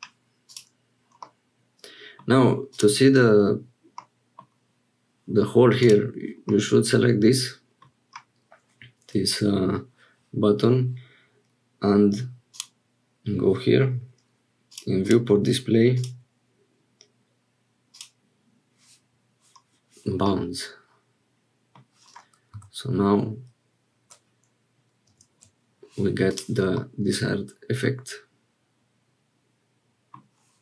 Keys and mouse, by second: 0.4 click, 1.3 middle click, 2.7 click, 4.0 middle click, 5.8 click, 6.5-7.9 middle drag, 14.7 click, 15.0 click, 16.1-18.3 drag, 20.2-21.8 middle drag, 26.3 click, 26.7-30.2 middle drag.